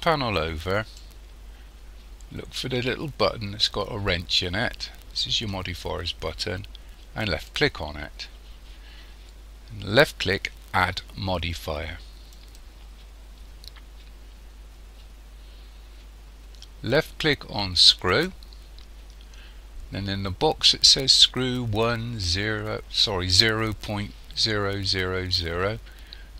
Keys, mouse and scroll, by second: 7.2 click, 12.3 click.